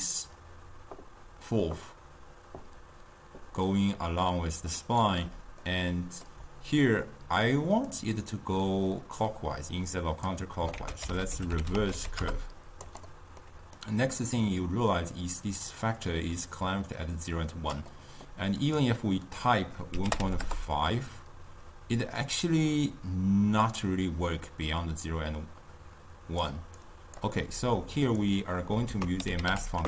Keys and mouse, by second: 5.7-7.9 middle drag, 7.9-10.8 drag, 10.8 ctrl+a, 13.5 middle click, 14.4-17.4 drag, 18.6-21.6 drag, 22.0-25.1 drag, 26.9 click, 27.7-28.9 drag, 28.9 ctrl+a.